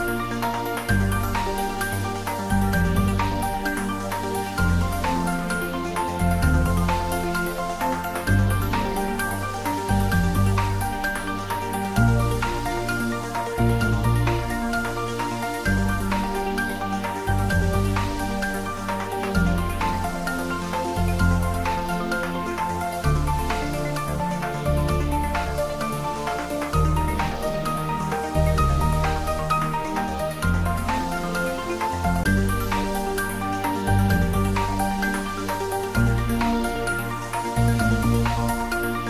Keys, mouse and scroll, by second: 2.3 click, 5.5 click, 9.0 click, 11.7-12.8 scroll down 1, 14.0 click, 17.6 click, 18.4 alt+shift+click, 29.9 click, 33.8 click, 35.8-36.2 scroll up 1, 36.2 scroll down 1.